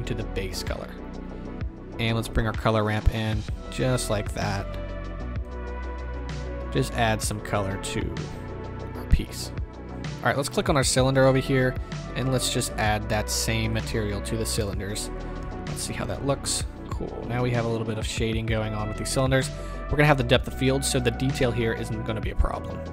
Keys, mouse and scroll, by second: 9.9-10.6 middle drag, 9.9-10.6 scroll up 2, 10.6 click, 13.2-16.1 drag, 14.6 KP_0, 15.9 right drag, 15.9 z.